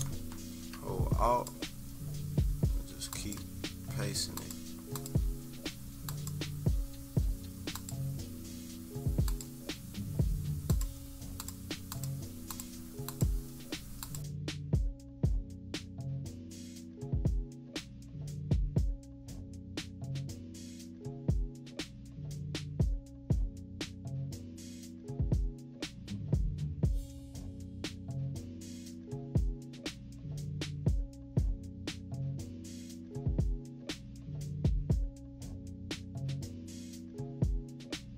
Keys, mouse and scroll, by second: 1.4 click, 4.5 click, 5.0 click, 6.2 click, 7.8 click, 9.4 click, 10.7 click, 11.4 click, 12.0 click, 13.2 click, 14.0 click, 14.3 click, 14.6 click, 15.0 click, 16.4 -, 16.6 =, 16.7 click, 16.8 scroll up 2, 16.8 =, 16.9 scroll down 2, 17.1 click, 18.9 click, 19.1 click, 19.4 click, 20.3 click, 20.7 click, 21.6 click, 22.1 -, 22.3 scroll down 1, 22.5 click, 22.6 -, 35.0 -, 35.3 =, 35.5 =, 35.5 scroll up 1, 35.8 click, 36.9 click, 37.0 click, 37.7 click.